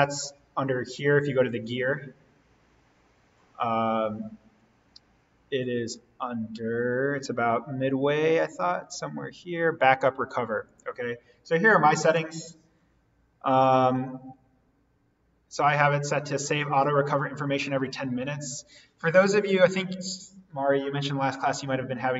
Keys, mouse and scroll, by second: 1.8 click, 10.0-14.7 drag.